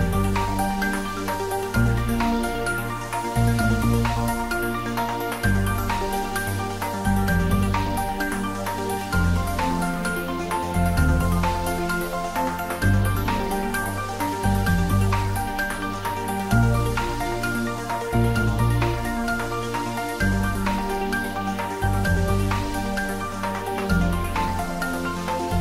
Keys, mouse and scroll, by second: 0.3-2.1 drag, 4.4-8.0 drag, 8.0-12.2 drag, 12.8 Return, 13.4 click, 14.7 click, 15.0 middle click, 15.6-17.4 drag, 19.6-21.5 drag, 22.9-25.6 drag.